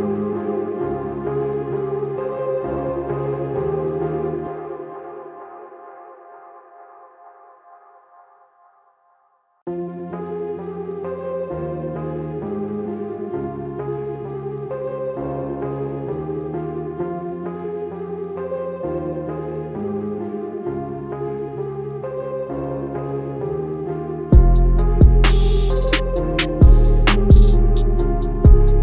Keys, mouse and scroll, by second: 1.7 click, 2.0-3.7 typing, 3.0 click, 3.5 click, 6.4 click, 6.9 i, 7.2 click, 7.4 a, 8.3 click, 8.5 i, 8.7 click, 8.9 a, 9.8 click, 10.1 i, 10.4 click, 10.6 a, 11.5 click, 11.9 i, 12.9 click, 13.1 a, 16.1 click, 16.7 i, 17.1 click, 17.4 a, 18.9 click, 19.3 i, 19.7 click, 19.8 a, 20.6 click, 21.2 click, 21.4 a, 23.0 click, 23.3 i, 24.1 click, 24.4 a, 25.4 click, 25.8 i, 26.8 click, 27.0 a, 27.6 click, 27.9 i, 28.4 click, 28.6 a.